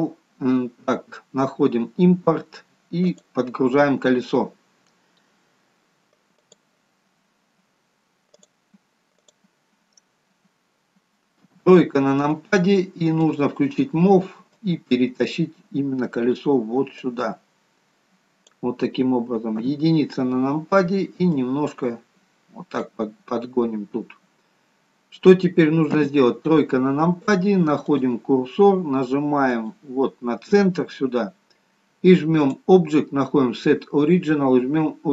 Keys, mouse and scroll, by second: 11.3 KP_3, 13.2 click, 14.5 click, 19.4 KP_1, 21.2 click, 23.2-24.2 scroll up 1, 24.2-25.9 scroll up 4, 25.9 KP_3, 27.8 click, 32.3 click.